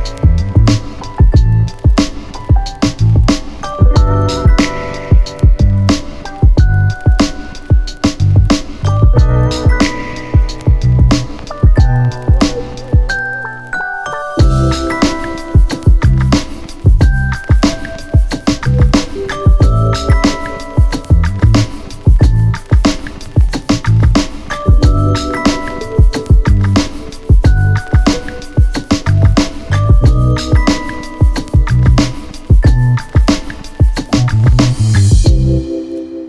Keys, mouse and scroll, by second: 0.5-0.9 middle click, 6.9-7.7 click, 9.1 space.